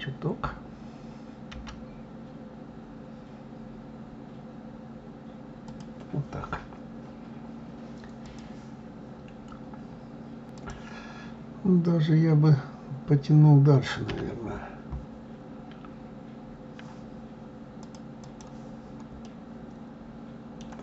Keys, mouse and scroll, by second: 10.9 KP_3, 18.1 click, 19.5-20.8 middle drag.